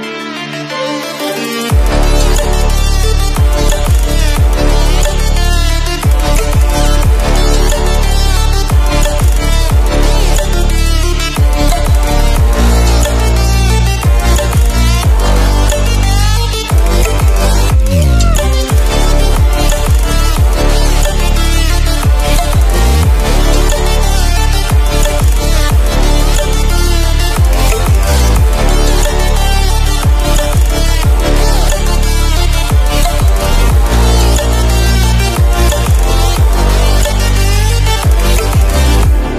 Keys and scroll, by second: 1.8 Return, 4.1 alt+7, 6.7 Escape, 23.2 alt+7, 24.8 alt+a, 26.1 Escape, 34.0 Return.